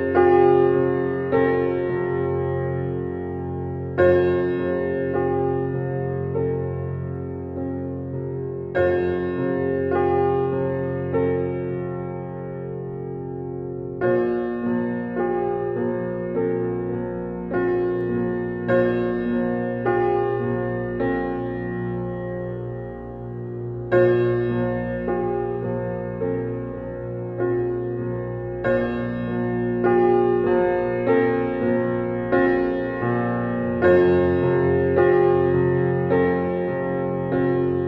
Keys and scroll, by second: 5.1 Right, 18.9 Right, 21.3 Right, 23.8 Right, 25.7 Right, 30.7 Right.